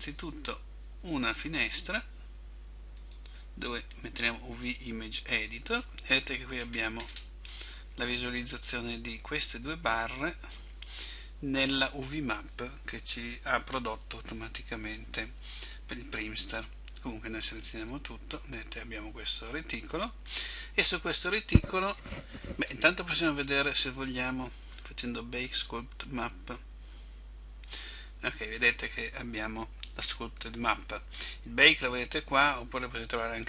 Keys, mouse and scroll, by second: 17.6 a.